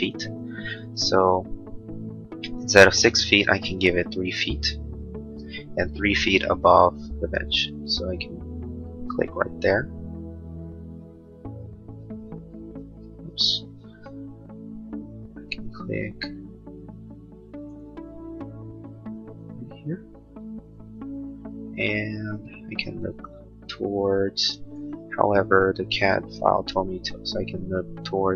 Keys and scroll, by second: 3.9-4.8 typing, 5.3 Return.